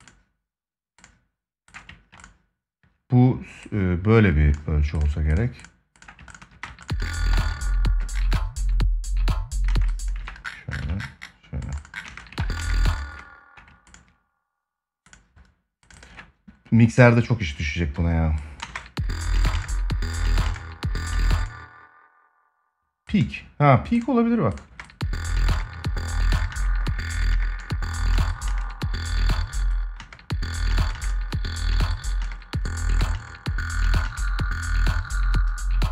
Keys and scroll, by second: 6.3 space, 7.1 ctrl+s, 9.4 space, 9.9 ctrl+c, 11.8 space, 12.1 ctrl+s, 12.3 space, 18.3 space, 24.4 space.